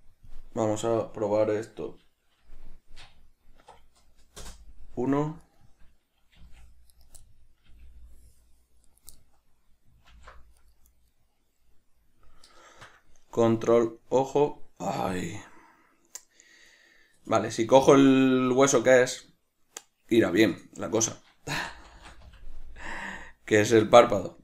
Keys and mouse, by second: 5.7 right click, 6.6 g, 7.3 right click, 7.5-9.2 middle drag, 8.0 g, 9.2 right click, 9.4-10.9 middle drag, 10.4 alt+g, 10.9 right click, 11.4-17.4 middle drag, 17.4 right click, 18.2 right click, 19.3 right click, 20.7-24.4 drag.